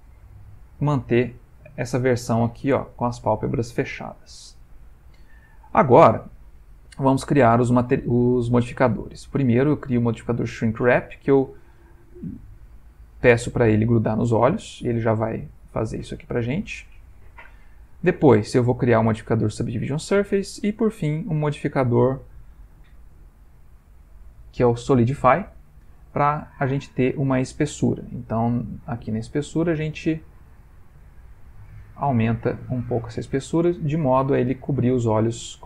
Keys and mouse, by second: 1.0 middle click, 2.8 Tab, 3.3 ctrl+middle click, 3.8 middle click, 7.1 click, 8.9 click, 11.5 click, 14.2 middle click, 16.9 ctrl+middle click, 17.0 ctrl+middle click, 18.2 click, 20.7 click, 25.8 ctrl+middle click, 26.5 ctrl+middle click, 29.2 shift+click, 33.9 middle click, 34.1 middle click.